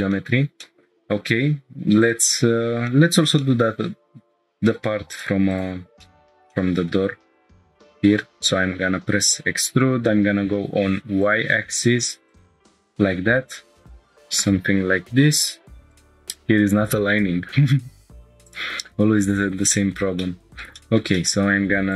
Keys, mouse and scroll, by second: 0.1 shift+middle click, 0.6 middle click, 1.1 Tab, 2.0 click, 2.5-2.9 scroll up 3, 2.9-3.3 shift+middle drag, 3.4 middle drag, 3.8 scroll up 1, 4.8 3, 5.1 click, 6.0-6.4 shift+middle drag, 6.5-6.9 middle drag, 6.9 click, 8.0 e, 10.2 y, 11.2-12.4 drag, 13.8 click, 15.8 click, 15.9 click, 18.6 click, 19.3 scroll up 1, 19.7-20.1 shift+middle drag, 20.2-20.6 middle drag, 20.8 shift+middle click, 21.1 middle click.